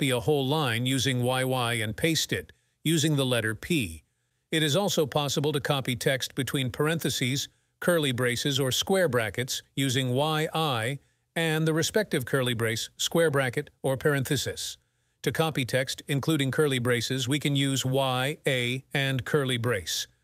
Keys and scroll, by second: 1.3 y, 3.3 p, 5.1 p, 7.2-8.2 typing.